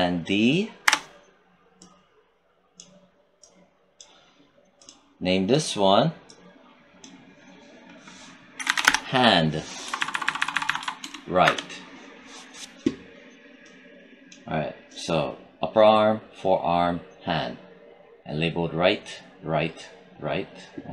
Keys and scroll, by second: 0.7 ctrl+d, 8.4 h, 8.5 a, 8.6 n, 8.7 d, 9.7 Right, 10.9 BackSpace, 11.3 Return.